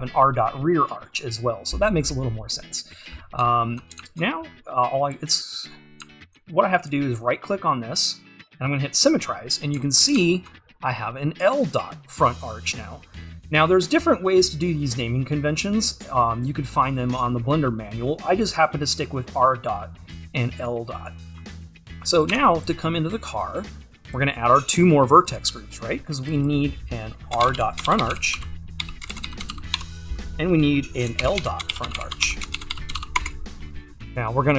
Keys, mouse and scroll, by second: 2.0-3.4 scroll up 2, 4.4-5.6 scroll up 2, 5.6-6.1 scroll down 2, 9.0 right click, 9.5-9.8 scroll down 2, 9.8 `, 10.5 shift+`, 13.1-16.8 scroll down 2, 16.8-17.5 scroll up 2, 17.5-22.3 scroll down 2, 22.3-25.2 scroll down 1, 25.2-34.5 drag.